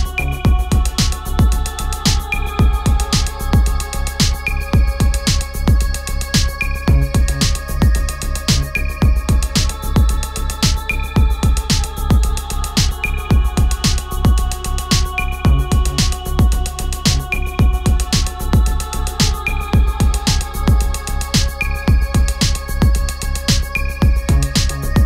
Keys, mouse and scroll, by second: 1.9 shift+Up, 3.6 click, 5.0 shift+click, 6.5 shift+click, 10.2 click, 10.2-16.4 drag, 18.7 click, 23.1-25.0 drag.